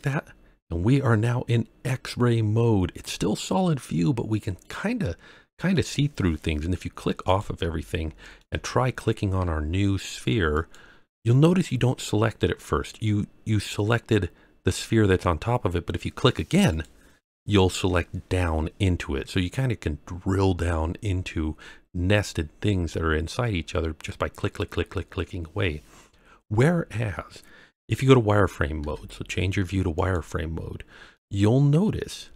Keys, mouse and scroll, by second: 0.0 click, 1.2-5.7 middle drag, 7.2 click, 7.8-8.3 shift+middle drag, 8.6-9.4 scroll up 2, 10.5 click, 16.7 click, 21.0-21.4 scroll down 2, 21.7-22.4 scroll up 3, 22.6-23.4 scroll down 2, 23.5-24.1 scroll down 2, 24.9-25.6 scroll up 3, 25.6-26.2 scroll down 1, 28.8 z, 31.1-32.3 middle drag.